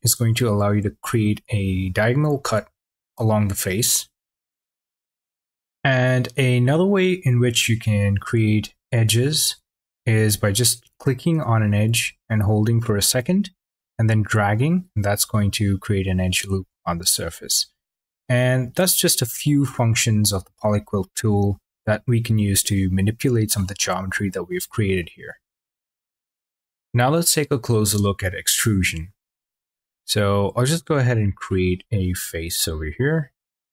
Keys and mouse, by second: 5.0 click, 11.3-16.8 drag, 31.4 click, 31.9 click, 32.4 click, 33.1 click.